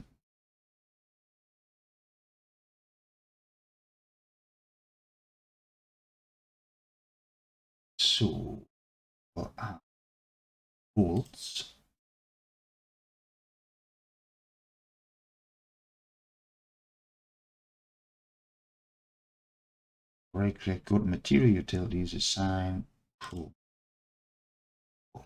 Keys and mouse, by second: 7.2-9.2 alt+drag, 11.2 click, 12.4 shift+click, 16.7-19.2 drag, 19.7-23.3 right drag.